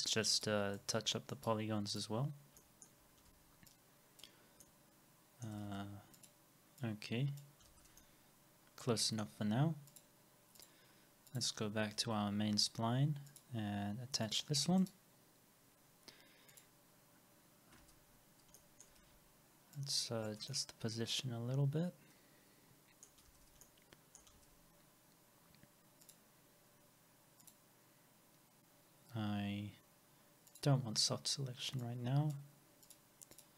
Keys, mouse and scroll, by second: 0.0 double click, 0.8 right click, 3.3 alt+x, 4.4 scroll down 1, 5.7 alt+x, 5.7 middle click, 7.7 alt+x, 8.0 alt+middle click, 12.0 alt+x, 12.6 scroll down 1, 17.8 alt+x, 19.0 alt+middle click, 19.0 w, 23.3 alt+x, 23.3 middle click, 24.5 scroll up 1, 29.0 scroll up 1, 33.4 double click.